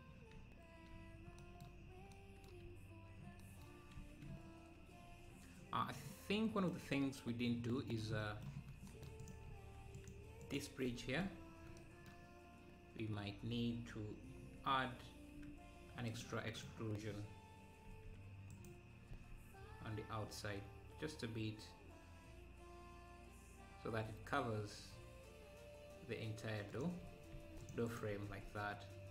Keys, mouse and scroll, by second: 1.1 scroll down 2, 2.0 scroll down 1, 4.0 ctrl+s, 5.6-5.9 scroll down 3, 5.9-7.0 middle drag, 7.0-7.5 scroll up 2, 7.8-8.9 middle drag, 9.2 click, 9.9 click, 10.9 Tab, 14.5-14.8 scroll down 2, 14.8 `, 15.6 scroll up 1, 16.6-17.9 drag, 17.9 r, 19.2 e.